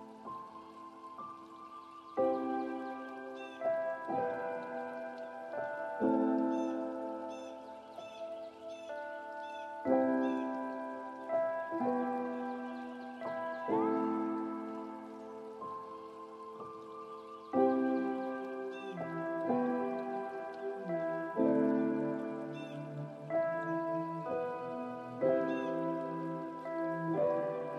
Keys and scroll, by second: 5.5 ctrl+space, 9.8 ctrl+t, 18.1 ctrl+space, 25.1 ctrl+g.